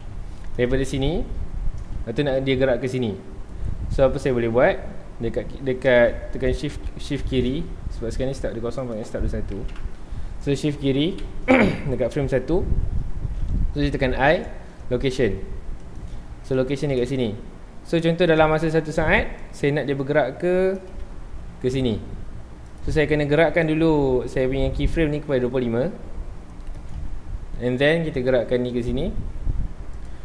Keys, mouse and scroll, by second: 1.8 scroll down 1, 2.1 g, 3.7 right click, 3.8 shift+scroll down 1, 3.9-4.2 shift+middle drag, 4.2-4.6 scroll up 1, 6.7 shift+Left, 8.8 click, 9.7 KP_Enter, 11.1 shift+Left, 14.0 i, 19.4-21.1 drag, 21.1 scroll down 1, 21.5 g, 22.8 click, 26.7 click, 27.3 scroll up 1, 28.1 g, 30.1 click.